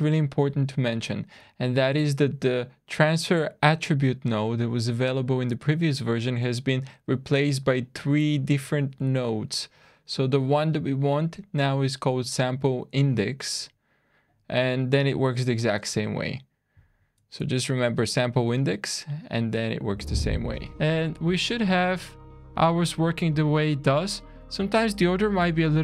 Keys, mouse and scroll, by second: 20.9 click, 20.9 shift+middle click, 20.9 scroll down 2, 25.5 click.